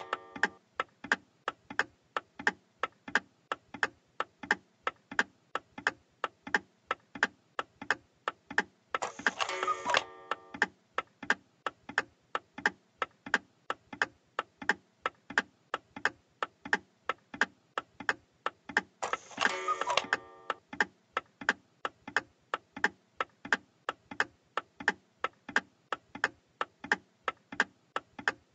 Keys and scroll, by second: 2.7 a, 7.9 w, 10.4 s, 11.3 d, 14.1 s.